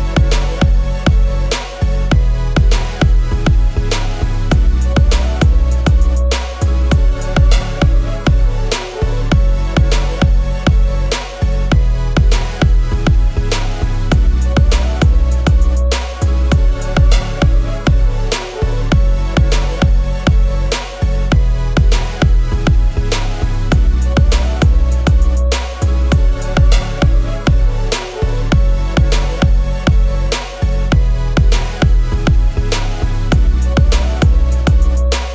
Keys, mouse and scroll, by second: 6.4 alt+click, 13.7 alt+click.